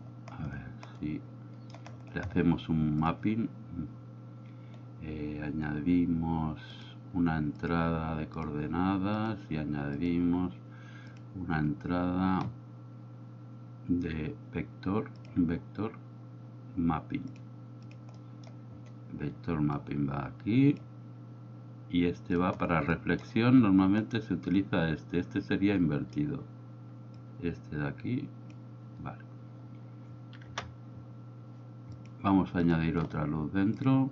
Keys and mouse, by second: 1.4 middle click, 6.8-9.4 drag, 10.1-13.9 drag, 15.3-17.9 drag, 18.3 middle click, 19.8-20.9 drag, 22.9-23.3 middle drag, 27.3-28.6 drag, 30.5 KP_0, 32.0 click, 34.0-34.1 drag.